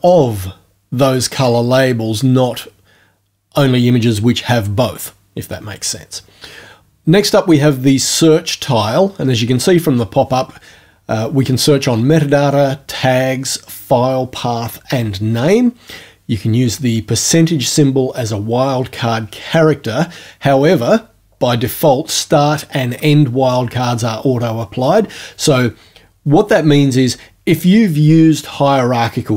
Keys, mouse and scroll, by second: 1.4 click.